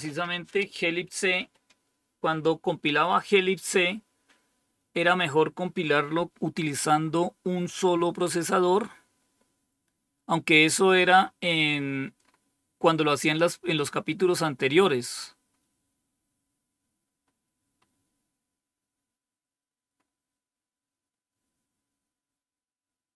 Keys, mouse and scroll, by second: 9.7 scroll down 2, 10.9-12.1 scroll down 3, 12.1 scroll up 2, 14.7 scroll down 2, 15.4-16.1 scroll up 1, 17.1-18.3 scroll down 3, 19.9-20.7 scroll up 1, 22.2 scroll down 2.